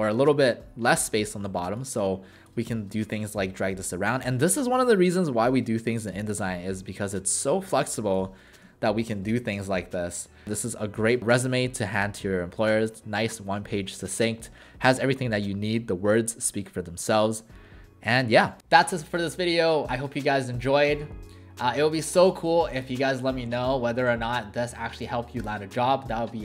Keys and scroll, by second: 1.4 w, 8.4-9.6 typing.